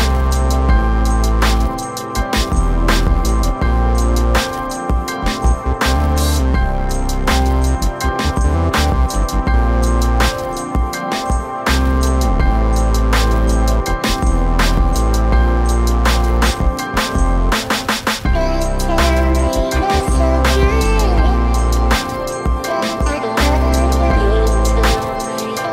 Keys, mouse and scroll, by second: 1.2 click, 1.6 right click, 1.6 typing, 2.2 click, 2.9 click, 6.0 click, 11.0 click, 11.7 scroll down 1, 12.2 click, 13.7 typing, 15.4-16.0 scroll down 1, 16.0 click, 16.5 right click, 17.3 click, 18.2 click, 18.2 typing, 20.1 scroll up 1, 20.3 click, 20.7 scroll down 1, 20.9 click, 24.2 click.